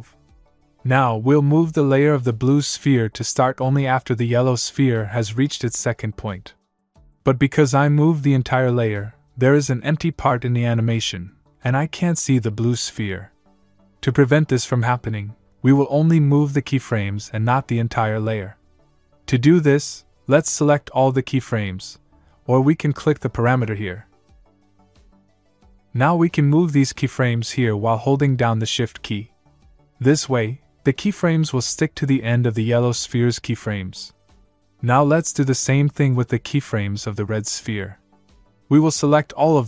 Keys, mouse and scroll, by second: 1.0 click, 3.9 click, 13.6 click, 16.1 click, 23.1 click, 24.9 click, 27.7 click, 33.1 click, 36.7 click, 38.5 click.